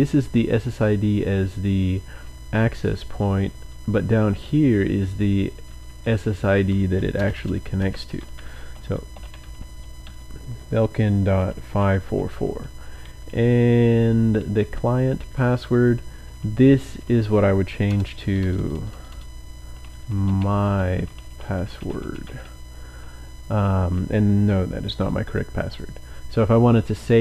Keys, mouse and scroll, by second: 2.9 Down, 3.1 Down, 3.6 Down, 3.8 Down, 4.3 Right, 4.8 Right, 4.9 Right, 5.1 Right, 5.4 Right, 6.7-10.0 typing, 11.0-22.2 typing.